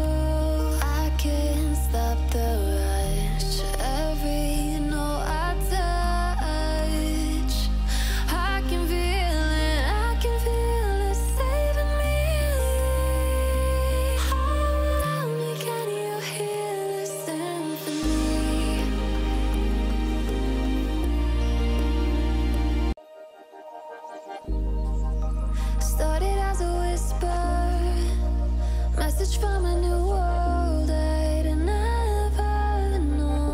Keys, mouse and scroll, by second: 0.0 ctrl+z, 0.3 click, 1.0 alt+scroll up 1, 1.6 click, 2.6 alt+scroll up 1, 3.0-3.6 drag, 5.1-6.1 drag, 7.8 alt+scroll down 1, 8.0 alt+scroll up 1, 8.2 click, 8.5 Right, 9.3 click, 10.6 drag, 11.5 alt+scroll up 1, 11.8 click, 12.5 drag, 17.2 alt+scroll down 1, 17.4 click, 18.1 alt+scroll up 1, 18.9-19.4 alt+scroll up 1, 19.6-20.4 click, 24.8-25.2 alt+scroll down 1, 25.4 alt+scroll up 1, 25.5 click, 26.6-27.0 alt+scroll up 1, 27.5 alt+scroll up 1, 28.4-29.0 alt+click, 30.2-33.5 typing.